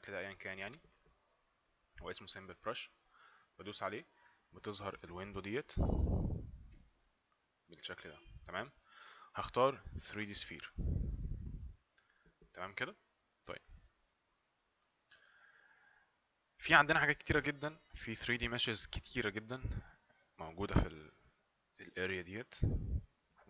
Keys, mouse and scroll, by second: 3.4 click, 11.3 click, 14.9 click.